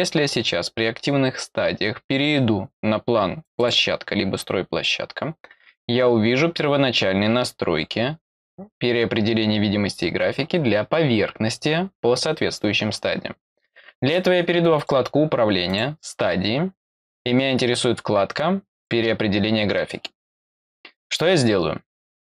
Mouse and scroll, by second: 3.4 click, 14.7 click, 15.6 click, 18.7 click.